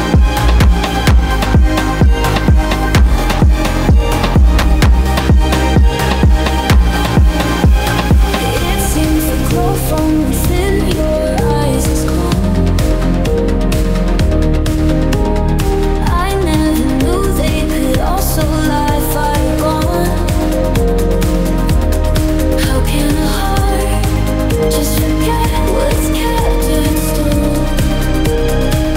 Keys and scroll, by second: 10.0 ctrl+0, 23.8 ctrl+z.